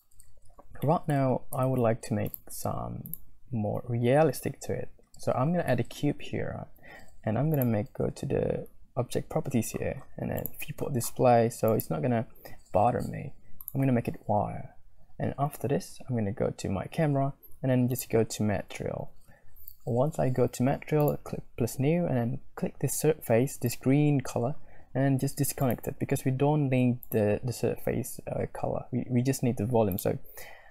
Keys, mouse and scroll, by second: 1.0 middle click, 1.6 shift+a, 3.7 s, 5.7 middle click, 5.7 scroll up 2, 5.9 click, 10.4 click, 11.7-13.8 drag, 18.0-19.1 drag, 23.7-27.2 drag, 29.9 click.